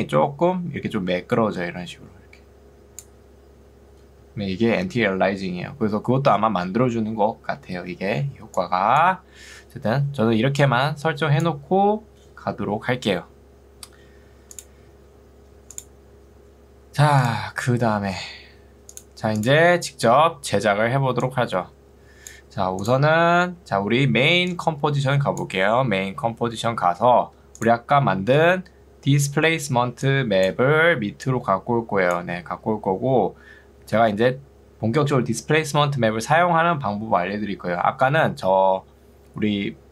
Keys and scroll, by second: 4.4 Escape, 8.4 ctrl+2, 9.4 Escape, 10.4 ctrl+2, 12.6 Escape, 23.8 ctrl+2, 26.8 Escape, 29.2 ctrl+2, 30.8 Escape.